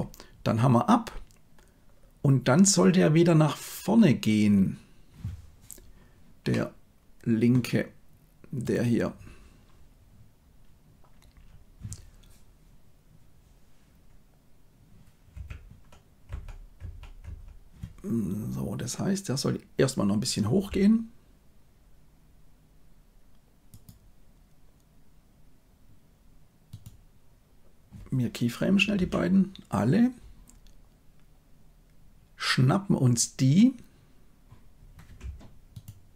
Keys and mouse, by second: 6.4-7.4 middle drag, 15.2 KP_1, 16.2 Right, 16.7 Right, 17.1 Right, 20.4 g.